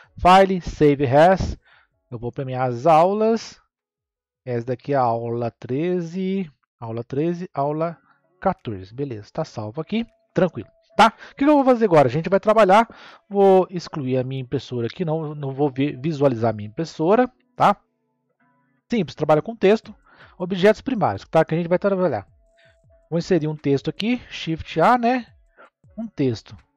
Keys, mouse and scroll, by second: 16.9 click, 17.9-19.3 scroll down 1, 19.3-20.6 shift+middle drag, 20.6 scroll up 1, 23.4 shift+a.